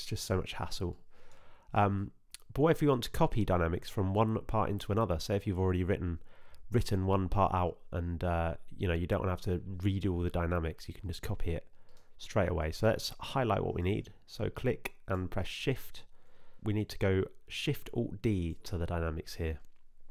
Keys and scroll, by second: 18.7 alt+shift+d.